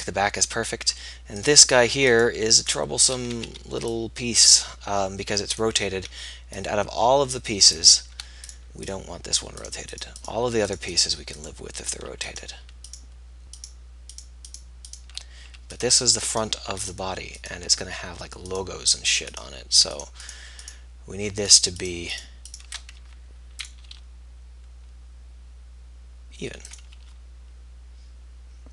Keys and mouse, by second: 1.8-3.8 middle drag, 3.8 a, 8.7 b, 9.8-23.3 middle drag, 23.3 g, 24.4 r, 27.3 g.